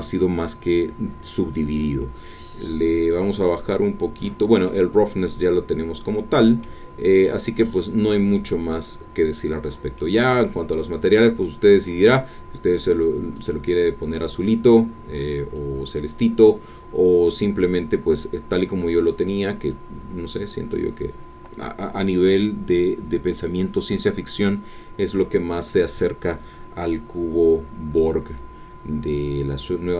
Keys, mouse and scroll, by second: 4.6-6.8 middle drag, 9.9 middle click, 11.8 click, 12.9 click, 14.4 click, 15.5 click, 17.2 click, 18.1 click, 19.3 click, 19.7-20.9 drag, 27.8 scroll down 2, 28.0-29.9 middle drag.